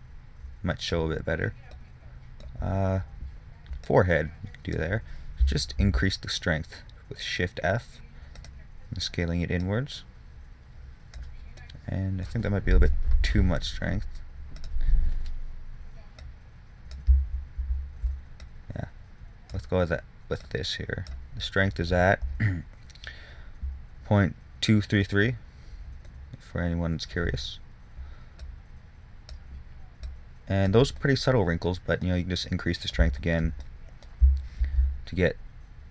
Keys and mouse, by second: 2.6-6.1 drag, 6.1 shift+f, 13.5 shift+f, 17.6 ctrl+z, 18.0 ctrl+z, 25.8-28.7 middle drag, 28.7-31.4 drag, 31.4-32.8 middle drag, 35.0 shift+f.